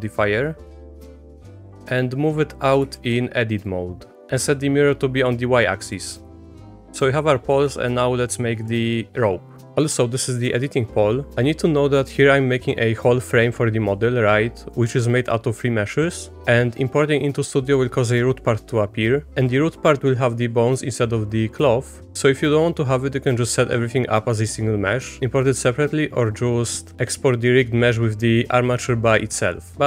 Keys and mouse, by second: 1.9 click, 2.9 ctrl+z, 3.6 click, 5.9 middle click, 6.3 Tab, 7.6 middle click, 9.8 click, 11.5 click, 12.2 click, 12.9 click, 13.9 click, 15.6 click, 16.6 click, 21.4 click, 21.9 click, 22.3 click, 22.8 click, 23.2 click, 25.3 click, 25.9 click, 27.5 click, 29.3 click.